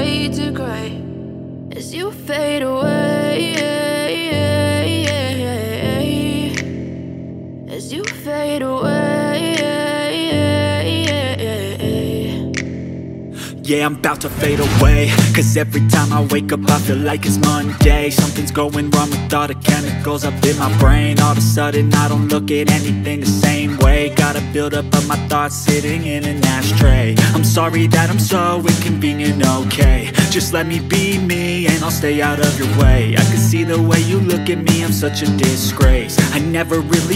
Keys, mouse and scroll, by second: 0.0-0.4 typing, 4.8-5.6 typing, 10.8-12.9 drag, 12.5 shift+middle click, 12.9-16.2 typing, 15.5 click, 15.5 middle click, 19.4 typing, 21.7 typing, 32.5 F10.